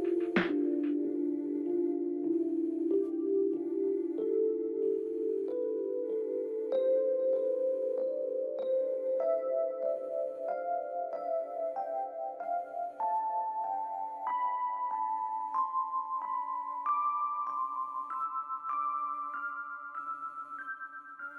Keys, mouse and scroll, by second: 2.8 ctrl+click, 5.5 ctrl+click, 6.2 ctrl+t, 7.4 alt+click, 10.5 alt+click, 17.4 ctrl+a, 20.2 ctrl+d.